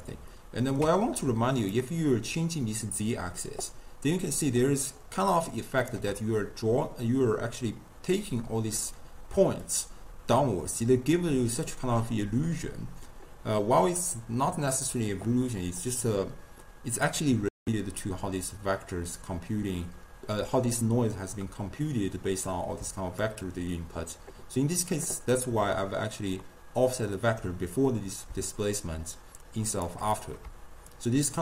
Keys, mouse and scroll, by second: 1.7-4.9 shift+drag, 9.7-12.8 shift+drag, 23.2-26.5 shift+drag, 26.5-28.8 middle drag, 28.8-31.4 shift+drag.